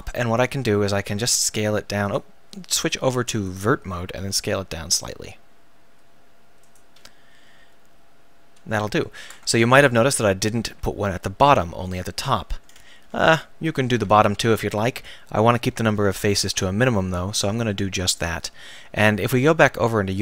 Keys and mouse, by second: 1.4 s, 2.2-3.3 drag, 4.2 s, 6.8 click, 7.6-8.7 drag, 9.3 Tab, 14.4 ctrl+s.